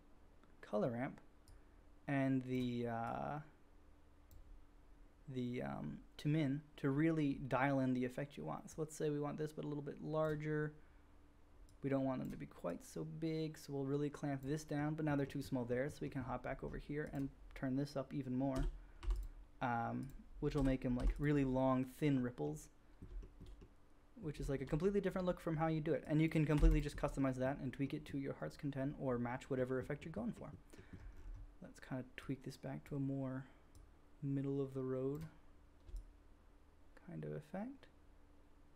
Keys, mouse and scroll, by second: 1.4-6.0 middle drag, 1.4-6.0 right drag, 11.9-19.1 middle drag, 19.1 click, 20.0-21.2 middle drag, 20.2-26.0 drag, 20.2 right click, 26.0-26.7 scroll up 1, 26.7-32.9 drag, 32.9-38.7 middle drag.